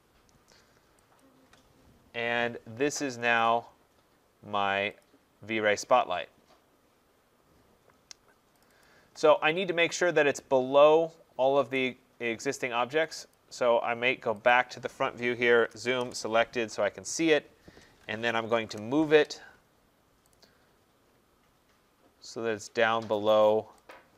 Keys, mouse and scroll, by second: 1.2 shift+click, 3.4 click, 5.0 click, 8.6 click, 8.8 click, 11.7 right click, 13.1 click, 13.3 click, 14.5 click, 15.6-16.0 typing, 17.1 middle click, 18.1-19.1 typing, 18.3 middle click, 19.4 middle click, 19.7 middle click, 20.3 click, 23.9 shift+click.